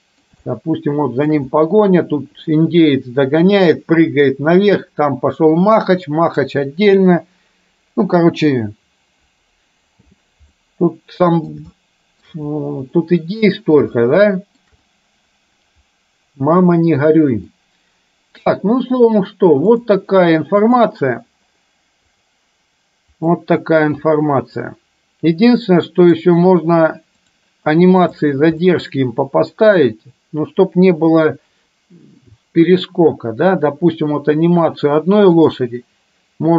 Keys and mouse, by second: 0.6-1.3 shift+middle drag, 10.2 space, 10.6-11.6 middle drag, 11.8-12.4 shift+middle drag, 13.1 middle click, 14.1-14.7 shift+middle drag, 17.6-18.6 middle drag, 19.8-20.9 drag, 22.2 click, 23.3 middle click, 25.6 middle click, 27.2 click, 28.7 middle click, 35.4 click.